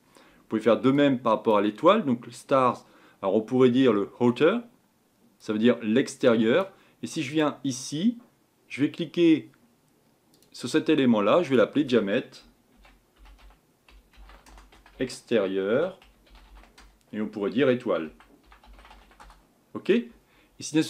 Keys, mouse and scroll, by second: 6.6 click, 19.2 click.